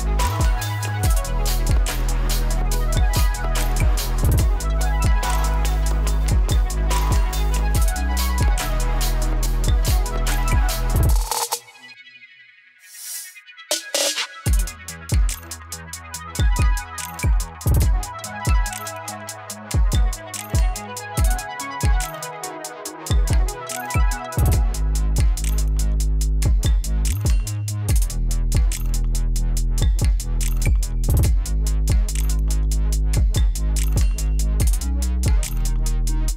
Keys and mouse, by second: 0.6-3.7 drag, 6.6 space, 7.5 click, 8.6 space, 10.8 space, 13.3 click, 13.9 space, 16.6-18.4 drag, 18.9 ctrl+d, 19.5-25.0 drag, 25.0 [, 26.5 click, 26.9 -, 27.0 space, 28.8-33.4 drag, 33.4 space, 34.9 space.